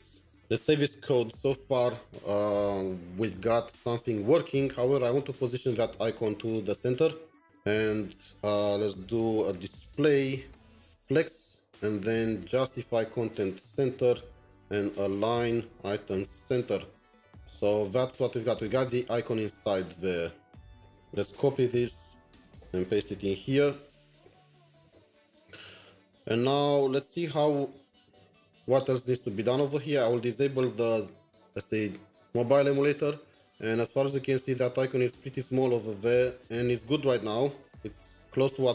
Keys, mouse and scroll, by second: 0.4 ctrl+s, 3.4 alt+Tab, 6.0 alt+Tab, 6.1 scroll down 1, 9.4 typing, 10.4-13.0 typing, 11.4 Return, 14.2 Return, 14.9-15.3 typing, 15.8 Tab, 16.8 Return, 20.8 Return, 21.0 typing, 21.5 alt+Tab, 24.8 alt+Tab, 25.2 typing, 27.4 shift+Tab, 27.9 alt+Tab.